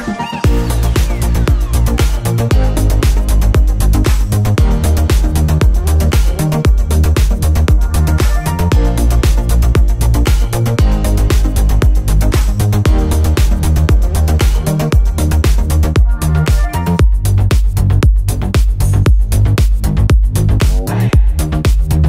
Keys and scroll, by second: 3.8 Return, 4.2 v, 4.3 Up, 4.8 Right, 5.6 Down, 6.2 ctrl+t, 8.8 Return, 9.0 Down, 15.4 Return, 18.3 t, 19.8-22.0 typing.